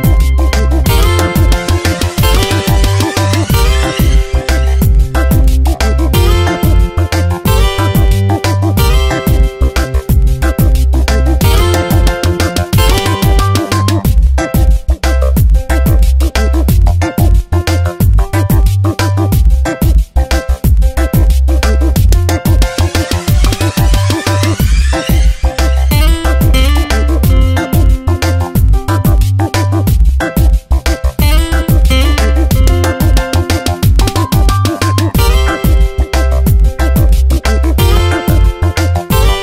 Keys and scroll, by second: 1.2 ctrl+t, 2.4 Return, 3.4 Tab, 4.9 ctrl+t, 12.3 Return, 13.3 ctrl+t, 14.5 Return, 17.3 Tab, 22.9 ctrl+g, 31.8 p, 38.1 ctrl+Return, 38.7 Delete, 39.2 ctrl+d.